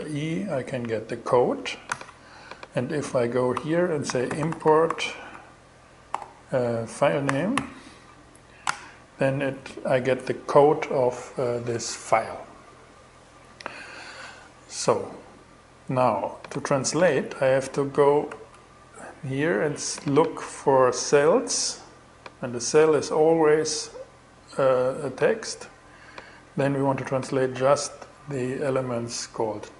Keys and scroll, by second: 1.3 shift+super+e, 3.3-4.8 typing, 5.6 alt+g, 6.7 alt+f, 7.0 n, 17.7 shift+super+e.